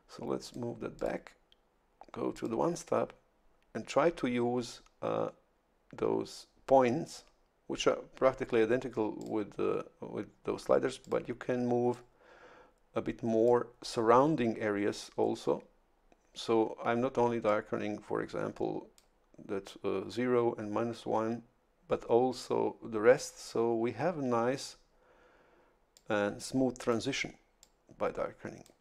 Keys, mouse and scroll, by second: 0.4 click, 1.0 click, 2.3 click, 9.2 click, 11.0 click, 11.9-13.7 drag, 17.5-19.2 drag, 25.9-27.1 drag, 27.6-28.8 drag.